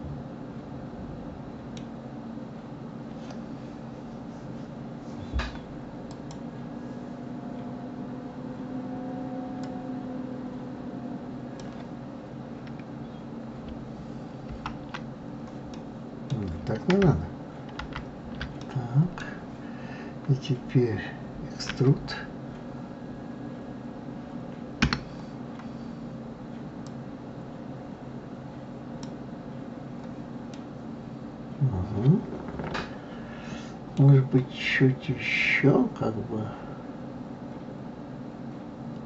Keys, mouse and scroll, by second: 6.1 click, 9.7-12.6 drag, 14.5 ctrl+t, 15.7-17.8 middle drag, 17.8 ctrl+z, 18.6-21.6 middle drag, 26.9-29.9 drag, 30.5-33.5 middle drag.